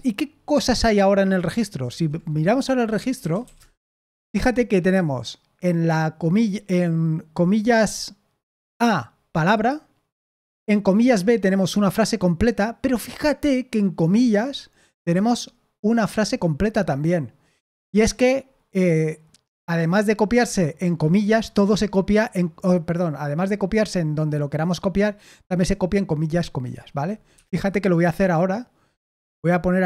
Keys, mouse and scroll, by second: 2.6-4.2 typing, 27.3 Escape, 28.9-29.8 typing.